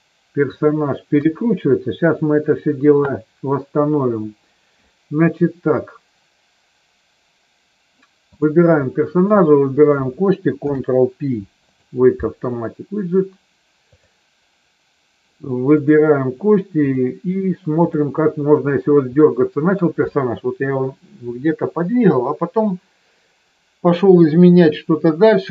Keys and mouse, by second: 1.1 KP_3, 8.2 click, 9.1 shift+click, 10.5 ctrl+p, 13.9 click, 15.7 click, 16.9-18.0 drag, 19.1 middle click.